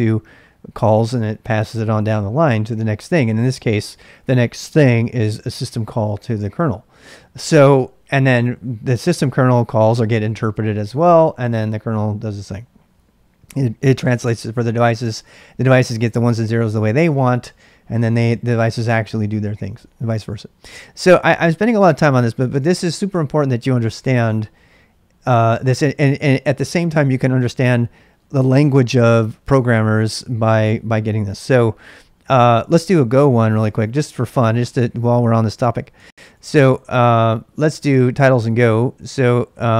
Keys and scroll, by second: 22.2-23.0 typing, 33.2-34.4 typing, 35.7-39.7 typing.